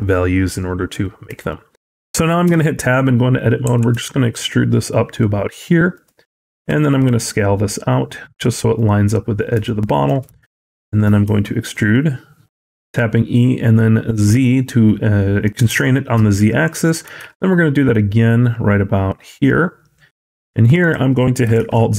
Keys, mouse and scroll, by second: 1.3 shift+middle click, 2.3 Tab, 3.5 e, 6.4 s, 9.5 shift+middle click, 10.3 e, 15.6 shift+middle click, 16.9 e, 21.4 alt+z.